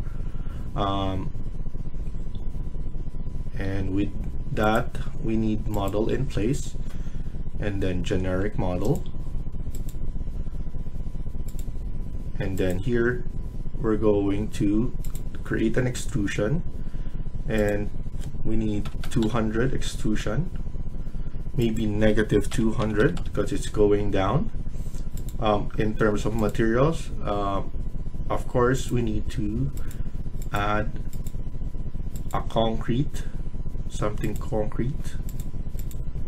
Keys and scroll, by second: 18.5-19.4 typing, 22.2-22.9 typing.